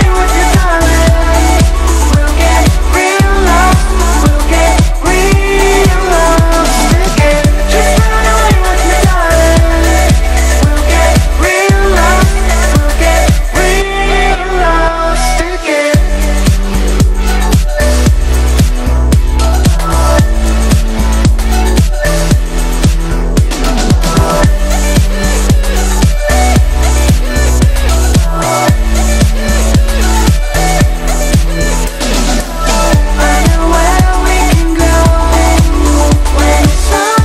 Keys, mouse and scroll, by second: 3.4-4.7 alt+drag, 5.9 click, 7.1 right click, 7.9-11.1 drag, 16.5 click, 16.9 Up, 23.1-24.5 drag, 25.3 Down, 26.3 Left, 26.7 click, 27.4 ctrl+-, 27.7 space, 27.9 click, 28.0 space, 29.2-29.8 click, 29.8 space, 29.9-30.4 drag, 35.8 right click, 36.7 click.